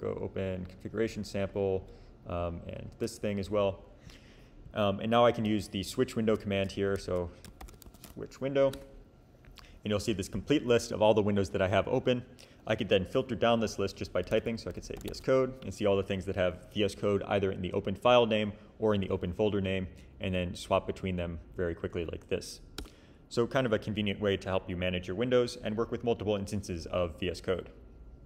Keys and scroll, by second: 7.6-8.7 typing, 14.0-15.5 typing, 20.2 Down, 20.4 Down, 20.8 Up, 21.6 Down, 22.8 Return.